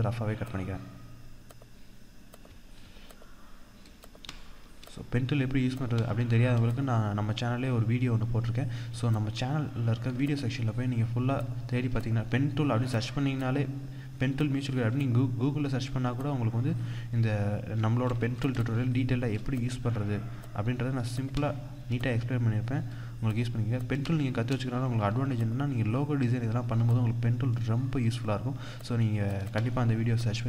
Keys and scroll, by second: 18.1 ctrl+=, 18.3 ctrl+space, 26.0 ctrl+z.